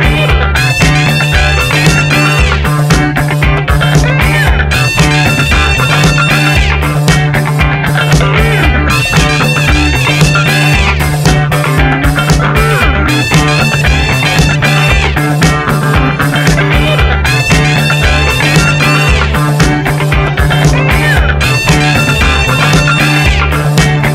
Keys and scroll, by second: 2.3 v, 3.4 F9, 5.3 u, 9.6 3, 9.8 Return.